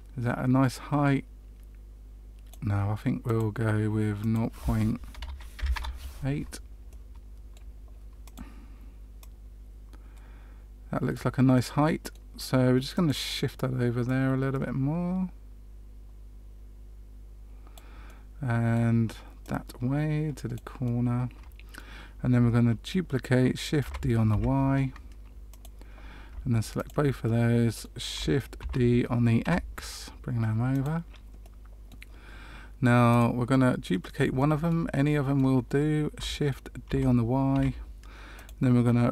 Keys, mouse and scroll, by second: 3.2 click, 4.1 click, 6.8 middle click, 8.2 click, 9.1 click, 11.5 middle click, 12.9 click, 14.0 click, 18.0 middle click, 19.4 click, 20.8 middle click, 23.8 shift+d, 26.7 shift+click, 27.2 middle click, 28.6 shift+d, 31.4 middle click, 33.1 click, 33.9 middle click, 34.3 shift+middle click, 34.9 middle click, 36.8 shift+d.